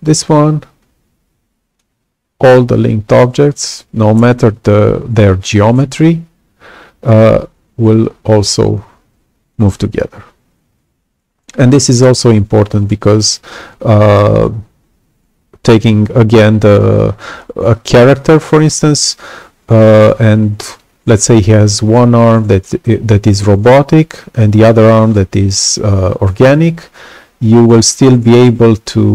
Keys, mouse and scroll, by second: 0.3-1.7 alt+drag, 7.8-9.5 alt+drag.